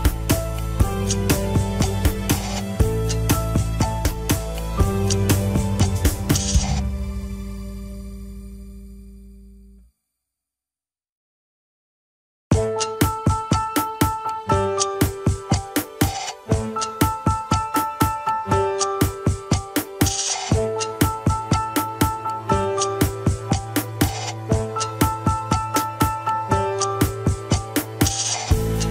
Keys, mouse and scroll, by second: 0.6 ctrl+p, 1.9 KP_1, 2.2 scroll down 3, 2.4 alt+z, 2.8 ctrl+Tab, 3.9-5.5 shift+middle drag, 5.5 click, 5.7 scroll down 5, 7.5-13.1 drag, 18.4 click, 21.0 click, 21.7 click, 23.2 shift+click, 24.8 drag, 25.1 click, 25.5 click, 25.8 right click, 27.6 click, 28.0 scroll down 1.